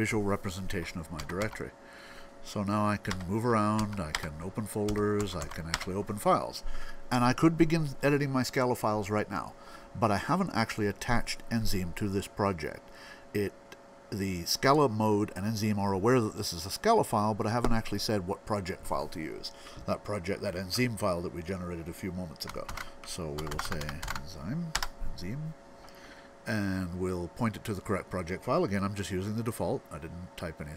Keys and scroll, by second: 1.0 Down, 1.2 Down, 3.7 Down, 4.9 Right, 5.2 Right, 22.5 alt+x, 23.0-26.2 typing.